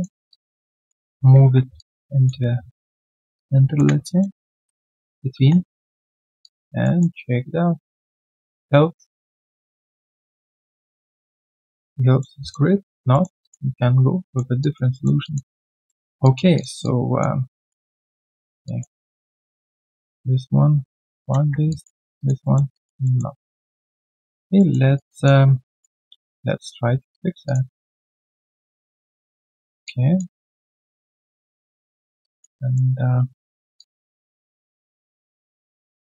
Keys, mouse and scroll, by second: 0.3 alt+click, 1.0 alt+middle click, 1.4 1, 1.7 alt+click, 2.9 ctrl+shift+click, 4.0 alt+click, 5.3 3, 5.5 right click, 6.4 alt+click, 6.8 alt+middle click, 7.1 alt+click, 12.8 alt+scroll down 1, 13.1 alt+middle click, 13.4 alt+click, 14.2 alt+middle click, 14.6 alt+click, 14.9 alt+middle click, 15.2 alt+click, 16.2 alt+click, 17.9 alt+middle click, 18.2 alt+click, 18.9 alt+right click, 19.1 alt+click, 21.4 1, 21.7 alt+click, 21.9 alt+right click, 22.1 alt+click, 22.4 alt+middle click, 22.7 alt+click, 23.0 alt+middle click, 23.3 alt+right click, 23.5 alt+click, 23.9 alt+middle click, 24.2 alt+click, 24.5 alt+middle click, 24.8 alt+right click, 25.0 alt+click, 26.0 alt+right click, 26.4 right click, 27.4 shift+click, 27.7 shift+right click, 29.8 alt+click, 32.2 alt+click, 32.5 alt+middle click, 33.7 alt+click, 35.0 alt+click, 35.6 right click.